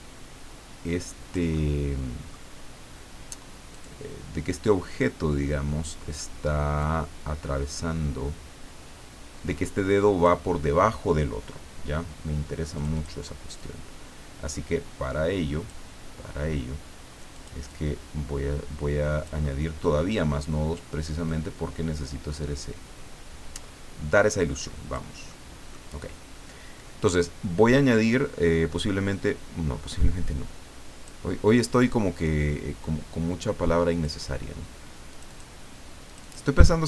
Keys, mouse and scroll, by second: 1.6-2.7 middle drag, 3.7 click, 6.8-10.5 drag, 12.7 click, 13.6-15.9 drag, 17.3 click, 19.5 middle click, 21.2-25.2 drag, 25.3 middle click, 28.8-31.4 drag, 32.1-34.3 drag, 35.1 click, 36.1 click.